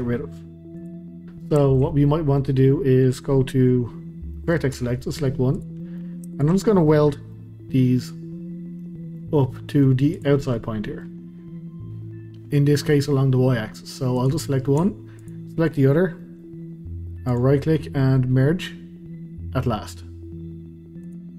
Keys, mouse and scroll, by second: 0.7 click, 1.2-2.5 middle drag, 2.5-4.4 scroll up 1, 4.4 middle click, 4.7 1, 5.5 click, 5.8 middle click, 6.3 shift+click, 7.3-10.1 middle drag, 10.1 click, 10.4 middle click, 11.2-11.9 scroll up 2, 12.5-14.2 middle drag, 14.2 click, 15.2 shift+click, 16.2-17.3 middle drag, 17.3-21.3 right drag.